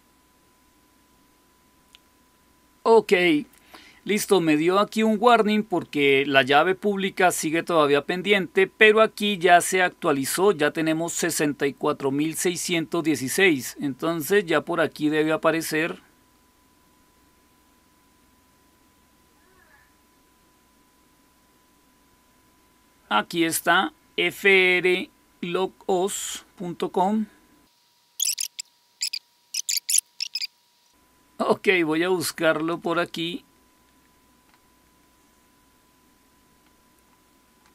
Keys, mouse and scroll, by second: 16.8-17.2 scroll up 1, 20.5-21.8 scroll down 1, 21.8-23.3 scroll down 1, 23.3 click, 32.6 click.